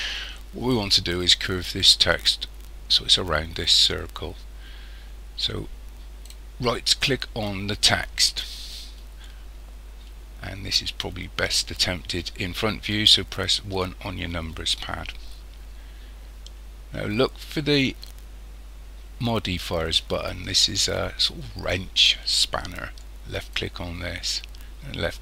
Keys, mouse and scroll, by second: 6.3 right click, 13.7 KP_1, 23.3 click.